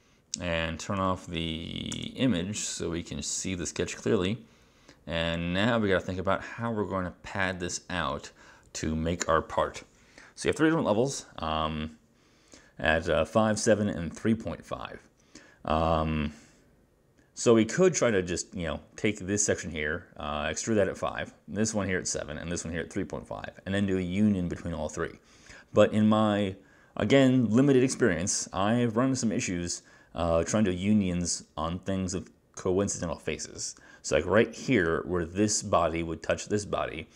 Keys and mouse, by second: 1.1 click, 2.0 space.